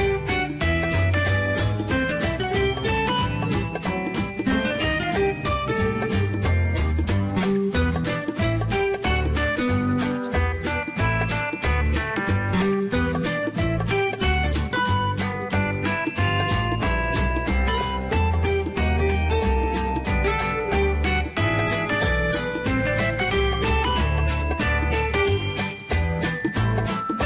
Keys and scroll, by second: 0.0 ctrl+z.